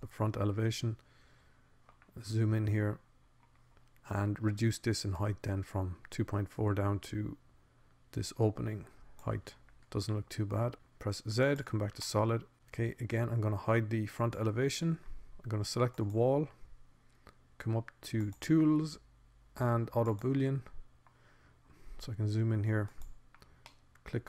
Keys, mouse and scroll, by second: 0.3 middle click, 1.5-3.3 drag, 6.9-8.5 drag, 10.3 middle click, 11.3 click, 12.3 z, 15.9-19.5 drag, 19.5 middle click, 19.9-21.5 drag, 21.7-22.9 drag.